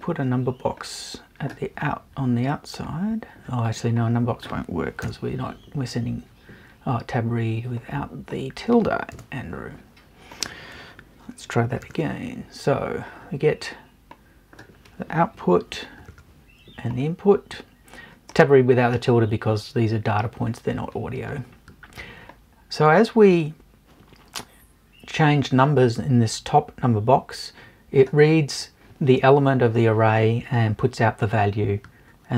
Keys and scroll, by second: 5.0 BackSpace, 9.1 BackSpace.